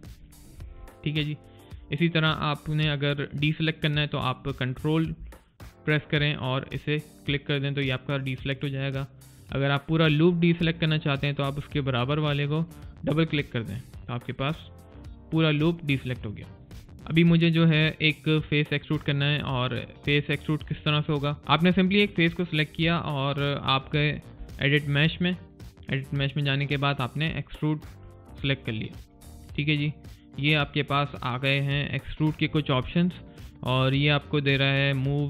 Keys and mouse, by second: 4.6 ctrl+Num_Lock, 6.5 ctrl+click, 12.9 click, 21.9 click, 22.7 alt+right click, 23.0 alt+click, 24.1 click, 27.9 click.